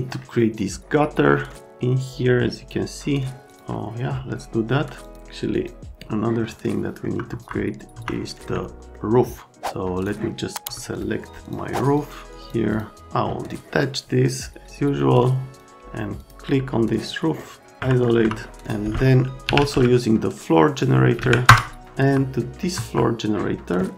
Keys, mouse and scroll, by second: 5.5 middle click, 6.7 right click, 7.3 F3, 7.9 F3, 8.9 alt+middle click, 10.0 click, 10.9 ctrl+click, 11.4 right click, 11.9 click, 12.3 click, 12.7 click, 15.6 click, 16.2 click, 18.0 middle click, 18.2 F3, 18.5 click, 19.2-20.0 typing, 21.2 Down, 21.5 Return, 21.9 F3, 22.4 right click, 22.7 F3.